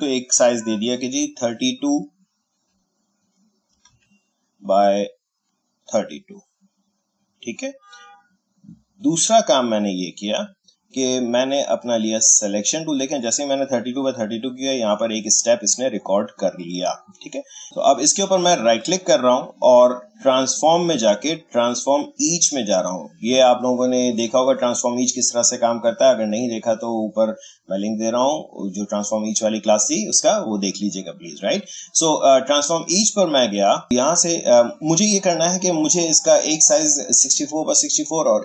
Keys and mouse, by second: 3.4-4.4 typing, 6.6 click, 9.0-11.5 drag, 18.6 right click, 32.8 click, 33.9-38.4 drag.